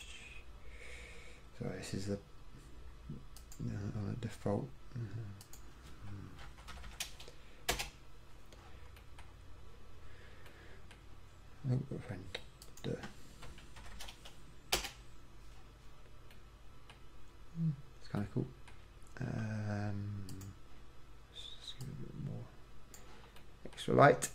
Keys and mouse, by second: 0.0-3.4 drag, 3.6-7.0 drag, 7.0 0, 14.1 0, 22.3 middle click, 22.6-23.8 middle drag.